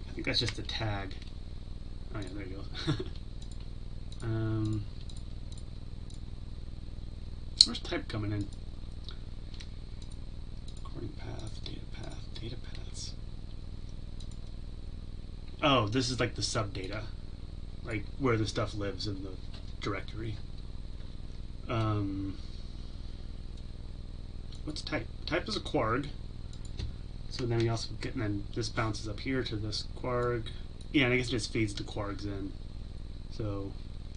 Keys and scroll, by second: 0.8 ctrl+b.